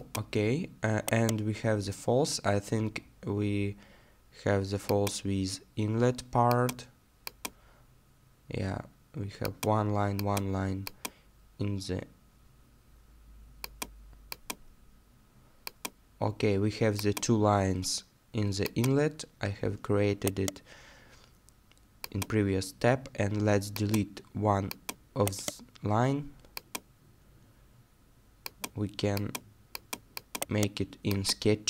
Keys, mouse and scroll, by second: 0.6 middle click, 1.1 right click, 2.0-2.4 scroll down 1, 3.4 middle click, 19.9-20.3 scroll down 1, 20.3 right click, 25.2 right click, 30.4 right click.